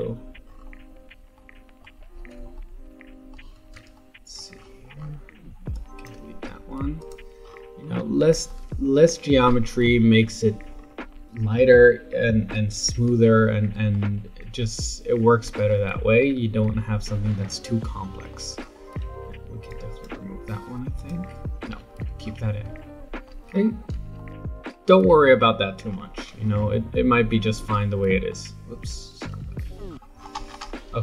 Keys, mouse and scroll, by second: 0.4-1.3 scroll down 7, 1.3 alt+middle click, 2.5-4.5 shift+middle drag, 4.5-5.1 scroll up 10, 5.7 click, 6.4 x, 7.4-8.5 scroll down 9, 8.5-9.6 shift+middle drag, 9.6-10.7 scroll up 5, 10.7 scroll down 3, 13.2-18.6 shift+middle drag, 18.6-19.7 scroll up 9, 19.7 click, 20.5 x, 21.6 ctrl+z, 22.1-22.5 scroll down 6, 22.8 shift+middle click, 23.5-24.1 scroll down 4, 24.1 shift+scroll up 1, 24.2 shift+middle click, 24.8-25.8 scroll down 4, 25.8-26.9 scroll up 15, 27.8-29.3 middle drag, 29.3 KP_7, 29.9-31.0 scroll down 17.